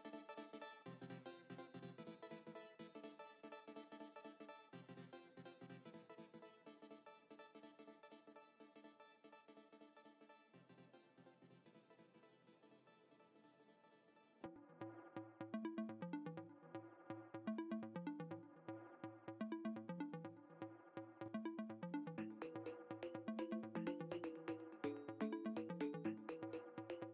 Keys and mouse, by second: 9.7 click, 12.2 ctrl+z, 18.6 F9, 21.0 click, 22.2 click, 23.5 click, 25.3 click.